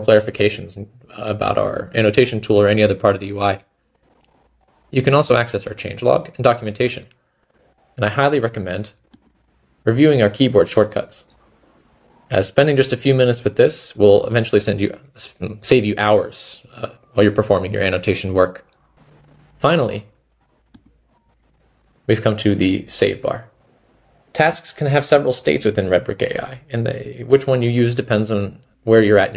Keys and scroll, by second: 20.4 typing.